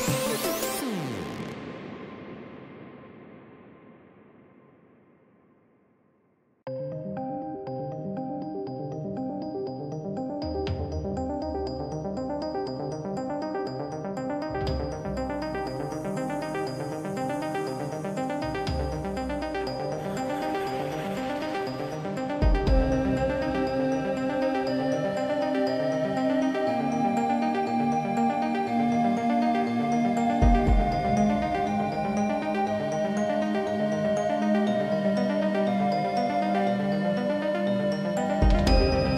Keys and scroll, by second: 2.9 ctrl+z, 21.0 ctrl+j, 23.0 ctrl+t.